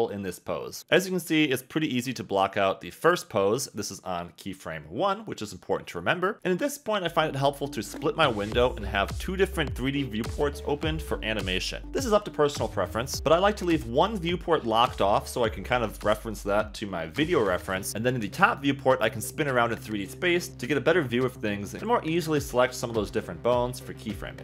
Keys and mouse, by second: 2.4 KP_3, 8.4 click, 11.9 KP_3, 12.7 KP_1, 15.9 click, 22.9 shift+middle click.